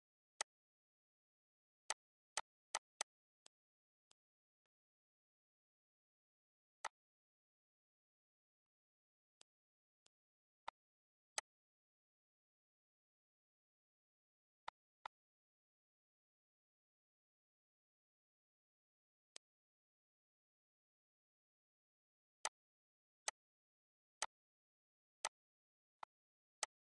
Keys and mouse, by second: 0.2 click, 1.3 click, 3.9 click, 6.7 click, 8.5 shift+click, 9.1 shift+click, 10.2 shift+click, 10.8 shift+click, 14.1 click, 16.4-18.4 typing, 19.0 click, 22.3 click, 23.1 shift+click, 24.0 shift+click, 25.1 shift+click, 25.7 shift+click.